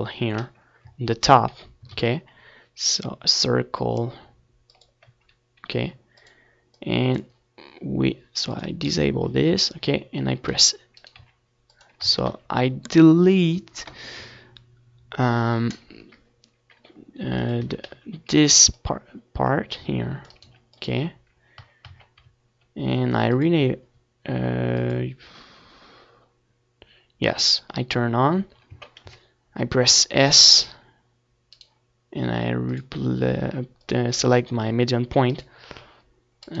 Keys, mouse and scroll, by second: 1.1-3.0 middle drag, 3.0 click, 3.2 a, 3.6 c, 6.2 right click, 6.3 x, 7.8 Tab, 8.3 middle click, 9.3-12.8 drag, 13.5-15.2 drag, 14.7-18.0 middle drag, 15.0 Tab, 15.3 a, 16.2 s, 18.0-19.1 right drag, 19.1 middle click, 20.0-21.1 drag, 21.1 s, 21.9-25.4 right drag, 22.3 s, 23.6 s, 25.6-26.7 right drag, 26.0 s, 26.7-28.5 middle drag, 28.5-30.4 drag, 30.3 right click, 30.4 s, 30.8-34.0 right drag, 32.5 s, 35.4-36.6 right drag, 35.8 a, 36.2 c.